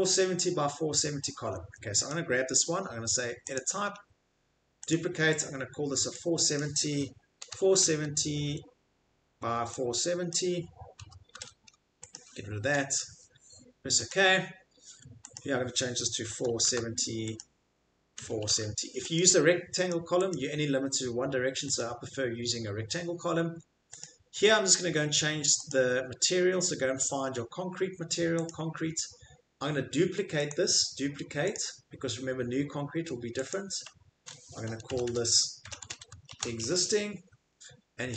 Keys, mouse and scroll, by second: 1.0 middle click, 1.1 Escape, 1.1 middle click, 1.4 middle click, 1.5 Escape, 1.5 middle click, 1.6 Escape, 7.4-8.3 typing, 10.3 click, 10.9-12.6 typing, 12.1 click, 14.1 click, 15.4 click, 16.2-17.1 typing, 17.4 click, 18.2-19.1 typing, 19.2 click, 19.9 click, 20.3 click, 21.8 click, 24.0 click, 30.5 right click, 31.5 click, 34.9-36.6 typing.